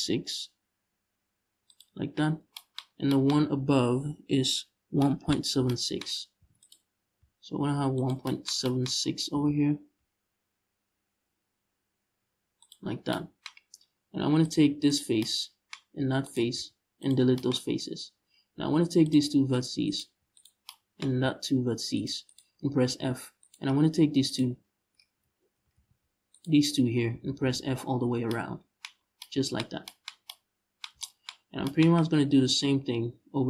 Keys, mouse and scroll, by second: 1.4 click, 2.0 scroll down 1, 2.6 scroll down 1, 6.0 ctrl+r, 7.7 shift+click, 8.6-8.9 scroll up 2, 8.9 g, 12.4 shift+click, 12.5 scroll down 1, 13.2-14.1 scroll up 1, 14.1 click, 14.5 right click, 15.9 shift+right click, 16.2 x, 17.2 scroll up 1, 18.7 click, 19.5 right click, 20.0 shift+right click, 21.6 shift+right click, 21.9 shift+right click, 22.6 f, 23.0 right click, 23.9 shift+right click, 24.6 z, 25.4 ctrl+z, 26.0-26.4 shift+right drag, 26.8 f, 27.5 scroll down 1, 27.7 Tab, 28.6 scroll down 1, 29.2 scroll up 1, 31.6 scroll up 1, 32.9 Tab.